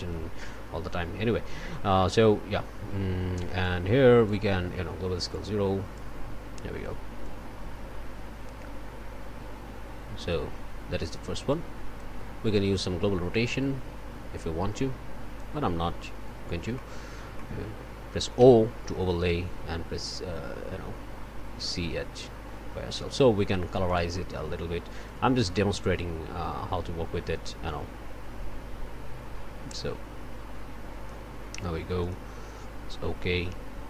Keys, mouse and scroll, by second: 3.6 click, 5.3 click, 7.2-12.2 drag, 13.4-15.6 drag, 15.6-16.7 scroll down 1, 16.7 click, 17.2 scroll up 1, 17.3 middle click, 17.4 click, 17.8-18.4 scroll up 1, 18.4 o, 23.9 click, 25.1-31.3 drag, 32.0 click.